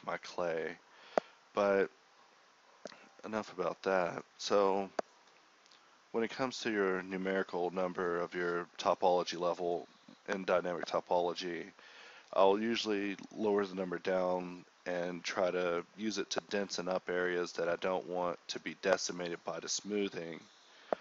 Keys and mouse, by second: 0.4 ], 3.8-4.1 ], 5.8 [, 6.6-8.1 drag, 13.1-16.0 drag, 16.8-19.9 drag, 20.2 click.